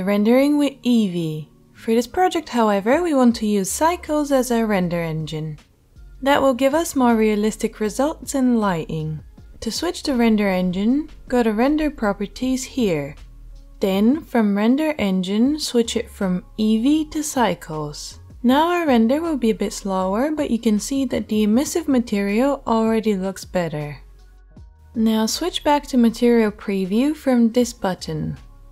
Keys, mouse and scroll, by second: 10.8 click, 10.8 middle click, 15.0-28.7 drag, 15.0-28.7 middle drag.